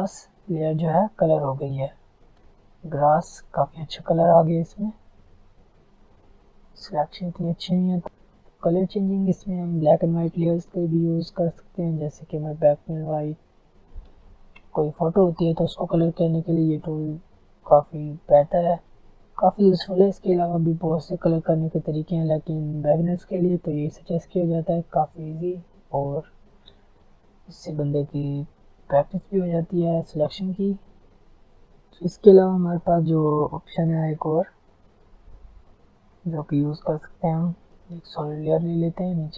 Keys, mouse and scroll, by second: 0.4 alt+scroll up 2, 1.4 click, 2.2-3.3 alt+scroll up 3, 2.8 click, 3.7 alt+scroll down 1, 5.1 alt+scroll up 1, 7.7 click, 8.6 alt+scroll down 1, 8.9 alt+scroll up 1, 9.8 alt+scroll down 1, 17.8 alt+scroll up 1, 18.1 alt+scroll down 1, 18.4 alt+scroll up 1, 19.4 alt+scroll down 1, 24.0 alt+scroll down 1, 24.4 alt+scroll up 1, 25.1-25.5 alt+scroll down 1, 25.7-26.7 alt+scroll up 3, 27.1 alt+scroll down 1, 29.2 click, 30.9 alt+scroll down 1, 31.2 alt+scroll up 1, 31.5 alt+scroll down 1, 31.7 alt+scroll up 1, 32.9 alt+scroll down 1, 33.7-34.0 alt+scroll up 3, 34.6-39.3 drag.